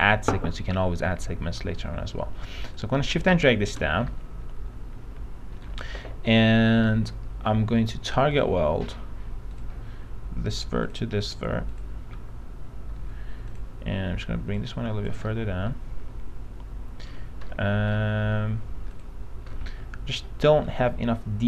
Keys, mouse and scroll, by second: 2.9 shift+click, 4.2 alt+middle click, 8.5 click, 12.3 click, 13.2 click, 15.6-17.3 alt+middle drag, 17.6 alt+middle click, 19.1 click, 19.7 alt+middle click.